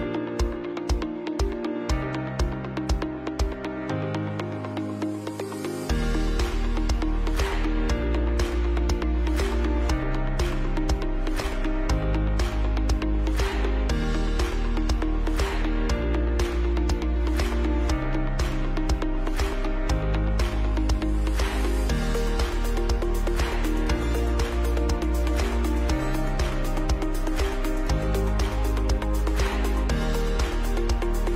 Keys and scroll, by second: 0.2 ctrl+3, 12.7 ctrl+b, 14.4 Down, 14.7 Down, 14.9 Right, 14.9 Right, 15.7-16.5 typing, 16.5 Down, 16.6 Right, 16.7 Right, 20.3 ctrl+shift+], 22.8 Return, 26.0 Return, 28.4 Return, 30.3 Up, 30.4 Up.